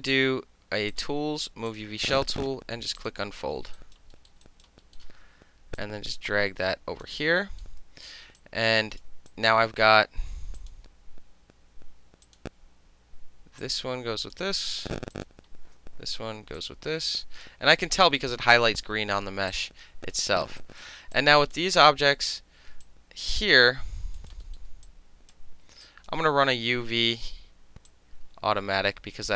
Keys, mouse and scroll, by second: 0.9 click, 1.7 click, 2.0 click, 3.0 click, 3.1 middle click, 3.7 alt+click, 3.9 alt+middle click, 4.3 alt+middle click, 4.4 alt+click, 4.6 alt+middle click, 4.9-5.8 alt+middle drag, 5.8-7.0 drag, 7.0-7.4 alt+middle drag, 7.6 alt+middle click, 8.4-9.0 alt+drag, 9.0 alt+middle drag, 9.3 alt+click, 9.5-10.6 alt+middle drag, 10.6 alt+click, 10.7-12.2 alt+middle drag, 12.2 click, 12.3-13.6 middle drag, 13.6-14.3 drag, 15.1 click, 16.5-17.4 drag, 18.7-19.5 middle drag, 19.5 alt+click, 20.1 alt+middle click, 20.4 alt+middle click, 20.6 alt+right click, 20.8 alt+middle click, 21.1 click, 21.5-22.8 middle drag, 22.8 alt+click, 23.5 alt+middle click, 24.2 alt+right click, 24.4 alt+middle click, 24.8-25.3 drag, 25.8 alt+click, 26.4-27.7 middle drag, 26.4 space, 27.9-29.3 drag.